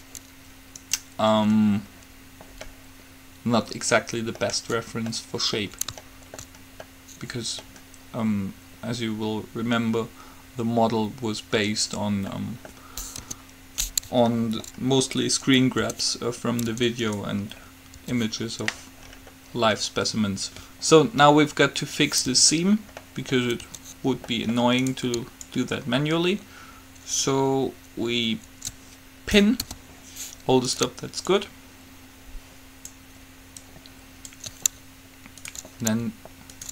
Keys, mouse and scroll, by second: 1.0 right click, 1.8-3.0 middle drag, 3.8 middle click, 13.3 KP_3, 16.1 Tab, 16.9 Tab, 18.3 Tab, 22.5 Tab, 23.8 Tab, 25.0-26.6 middle drag, 25.6 click, 25.6 right click, 26.8 click, 29.8 p, 30.9-32.8 right drag, 31.5-33.3 drag, 33.8-35.8 drag, 35.8-36.7 right drag.